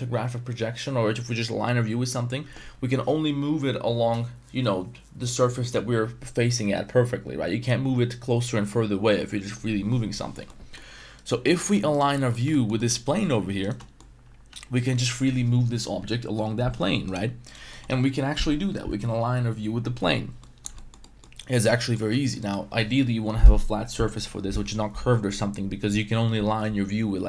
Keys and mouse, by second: 10.6 middle drag, 11.2 right click, 11.4 Tab, 11.4-11.7 middle drag, 11.9 right click, 12.1 middle click, 12.1 3, 12.5 shift+middle click, 12.8 middle click, 13.1 Tab, 13.6 right click, 13.8 middle click, 14.5 g, 17.5 right click, 17.7 middle click, 20.4 middle drag, 20.7 middle drag, 21.0 middle drag, 21.5 Tab, 21.7 middle click, 22.1 3, 22.4 right click.